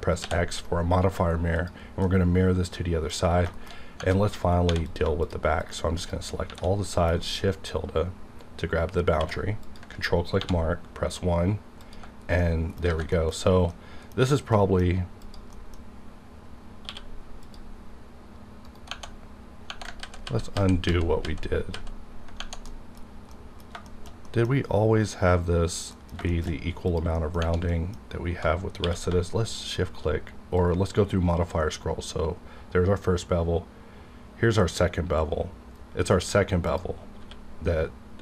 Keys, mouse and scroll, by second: 0.2 x, 1.6-3.7 drag, 2.0 middle click, 3.5 shift+middle click, 3.7 shift+scroll up 3, 4.1 middle click, 4.2 middle click, 4.4 scroll down 1, 4.7 3, 4.8 click, 5.2 shift+click, 6.5 shift+`, 6.9 middle click, 7.8-9.1 scroll up 2, 9.1 scroll up 1, 9.1 q, 9.7 ctrl+click, 10.4 1, 10.7-11.8 scroll up 1, 11.8 click, 12.2 scroll down 1, 12.4 middle click, 12.7 middle click, 12.9 alt+a, 13.1 middle click, 13.4 scroll up 1, 13.7 middle click, 14.9 scroll up 1, 15.2 click, 15.7 scroll up 1, 16.8 q, 17.4 click, 18.7 right click, 18.9 Tab, 20.1-21.7 typing, 22.7 middle click, 23.0 ctrl+scroll down 2, 23.3 middle click, 23.9 shift+middle click, 26.5 shift+scroll up 2, 26.9 click, 27.7 middle click, 29.1 q, 30.5 click, 31.2-32.6 scroll up 1, 33.7-34.2 scroll down 1, 34.8-35.1 scroll up 1, 36.6 click, 37.2 q.